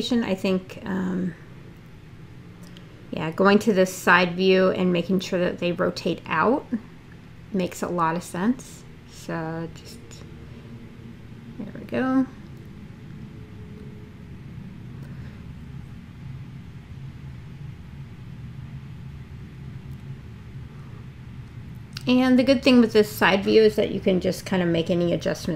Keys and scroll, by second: 5.3 space, 9.2 e, 20.3 w.